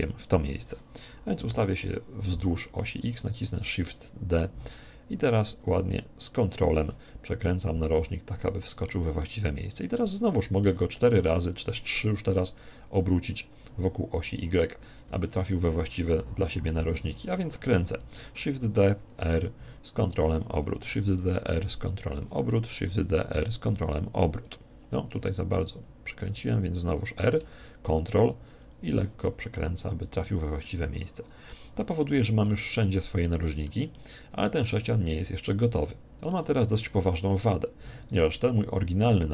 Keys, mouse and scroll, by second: 1.4 KP_3, 3.4 shift+d, 6.6 click, 7.4-9.1 middle drag, 11.8 middle click, 15.2-16.8 middle drag, 16.2 KP_1, 18.2 shift+d, 20.2 click, 22.1 click, 24.4 click, 26.3 r, 28.7 click, 29.6-31.4 middle drag, 30.8 z, 31.5-36.8 middle drag, 37.0-38.8 middle drag, 38.0 right click.